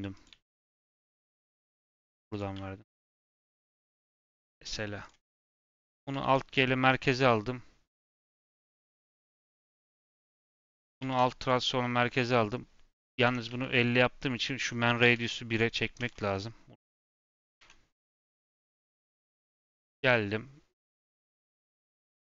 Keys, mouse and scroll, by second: 0.2 e, 1.0 e, 2.2 click, 2.4 g, 3.1 Tab, 3.2 scroll down 3, 3.4 middle click, 3.7 scroll up 4, 4.0 middle click, 5.0 click, 5.2 middle click, 5.4-6.1 scroll up 1, 6.1 alt+g, 6.5-7.9 middle drag, 7.9 click, 8.3-10.4 middle drag, 10.4 Tab, 10.6 Tab, 10.9 ctrl+a, 12.1 n, 13.2 Tab, 13.4 a, 14.5-16.0 drag, 17.0 n, 17.5 Tab, 18.3 middle click, 18.9 scroll up 2, 19.8 scroll up 1, 19.8 click.